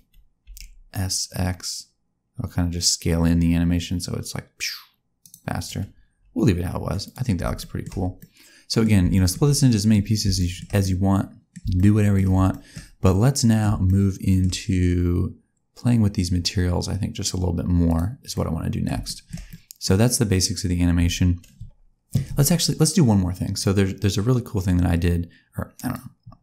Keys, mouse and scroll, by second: 7.0 click, 7.5 shift+middle click, 8.1 middle click, 9.1 shift+middle click, 10.3 shift+middle click, 10.7 middle click, 11.7 shift+middle click, 12.7 middle click, 13.0 middle click, 13.8 shift+middle click, 17.8 click, 18.3 middle click, 19.0 shift+middle click, 19.4 middle click, 19.8-20.3 scroll down 1, 20.9 space, 23.6 click.